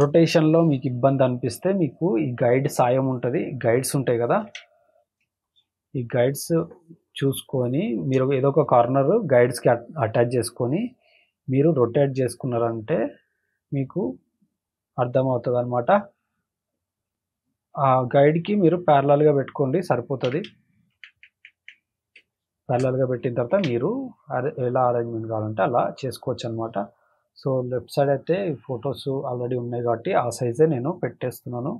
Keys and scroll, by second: 4.4 ctrl+t, 5.2 space, 5.7 space, 20.2 Return, 20.9 ctrl+-, 22.1 space, 22.6 space, 23.5 ctrl+t.